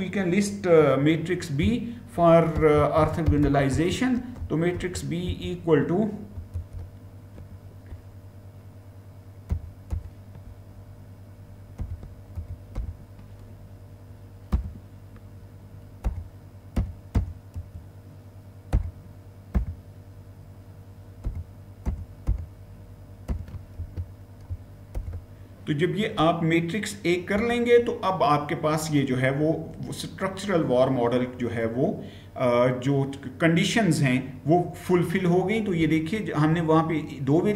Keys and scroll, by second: 2.2-5.1 typing, 6.3 typing, 9.0-9.8 typing, 11.6-12.6 typing, 14.3 typing, 15.9-17.3 typing, 19.1-19.8 typing, 21.1 typing, 22.9-23.7 typing, 24.8 typing, 27.2 Return.